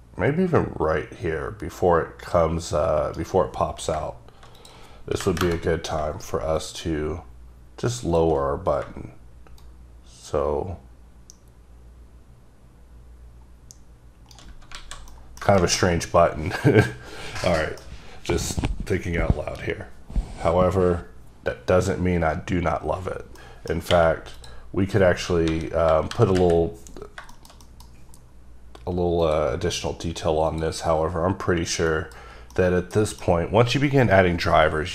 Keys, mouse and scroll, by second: 4.7 click, 5.3 KP_0, 5.6 KP_Enter, 6.7 shift+click, 9.7 shift+right click, 14.9 alt+a, 15.2 middle click, 15.5 shift+scroll down 1, 17.6 middle click, 23.5 middle click, 24.5 click, 25.6 KP_7, 26.0 KP_5, 26.2 KP_5, 26.5 KP_Decimal, 27.2 scroll down 2, 27.4 shift+middle click, 28.1-28.7 scroll up 2, 29.3 click, 30.6 click, 31.7-32.0 scroll down 1, 32.0 middle click, 32.7 middle click, 33.6 scroll down 1.